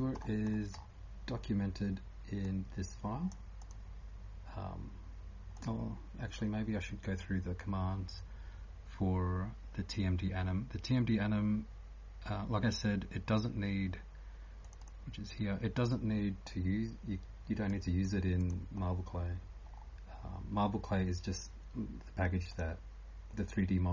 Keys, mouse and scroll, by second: 0.0-23.9 typing, 0.2-0.8 scroll up 10, 1.3-2.4 scroll up 3, 2.4 click, 14.8 click, 18.8 scroll down 1, 19.6 scroll down 6, 19.8 scroll, 20.6 scroll down 4, 22.5 click, 22.5 scroll up 3.